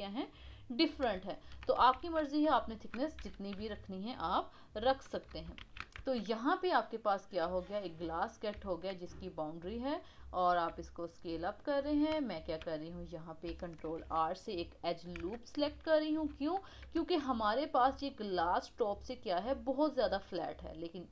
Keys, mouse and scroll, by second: 0.7-1.0 scroll down 3, 1.3 shift+middle click, 1.9 shift+z, 2.3 scroll up 1, 2.6 shift+middle click, 3.2 g, 5.6 shift+z, 6.0 Tab, 6.2-8.5 middle drag, 8.5 Tab, 9.6 click, 9.8 click, 10.5 s, 11.8 scroll up 2, 12.3-13.8 shift+middle drag, 13.8 ctrl+r, 15.2 KP_1, 15.5 scroll up 2, 15.9-17.0 shift+middle drag, 17.0 Tab.